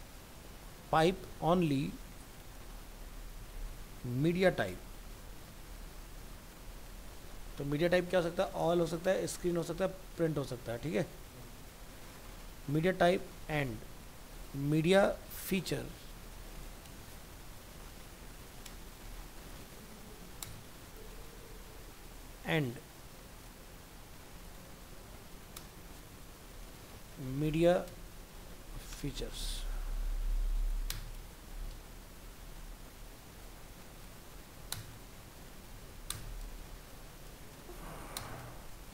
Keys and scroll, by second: 3.5 ctrl+shift+Right, 15.5 ctrl+shift+Right.